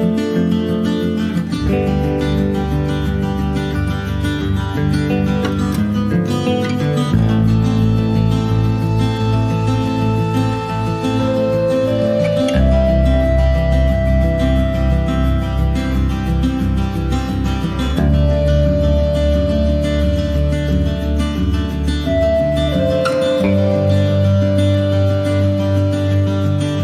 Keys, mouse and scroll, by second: 0.3 click, 0.6 shift+middle click, 0.9 s, 2.1 click, 2.7 s, 3.7 click, 4.2 click, 4.5-5.1 scroll up 3, 4.8 shift+middle click, 5.2 click, 5.5-7.1 middle drag, 7.1 click, 7.5 shift+middle click, 8.0 click, 8.4 scroll down 1, 8.7 shift+middle click, 8.9 s, 11.3 click, 11.5 shift+middle click, 11.7 scroll up 1, 12.0-13.1 middle drag, 13.1 click, 13.5 s, 15.7 click, 16.0 scroll up 4, 16.1 shift+middle click, 17.0 ctrl+s, 17.2 scroll down 3, 17.5 middle click, 18.1 scroll up 1, 18.2 scroll down 1, 18.4-19.5 shift+middle drag, 19.5 ctrl+s, 21.1 middle click, 21.5 click, 21.9 click, 22.6 click, 25.5 click, 26.6 click.